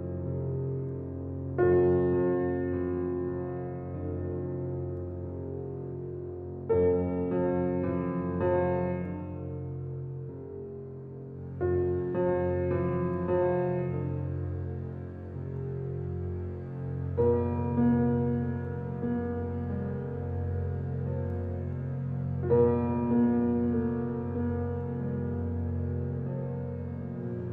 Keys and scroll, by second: 1.7 shift+d, 12.4 s, 18.5 s.